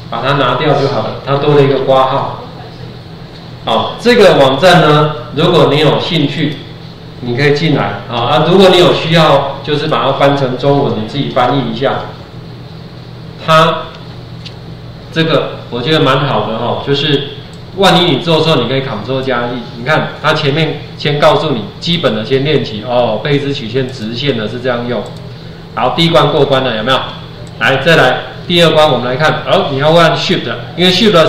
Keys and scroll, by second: 1.7 ctrl+4.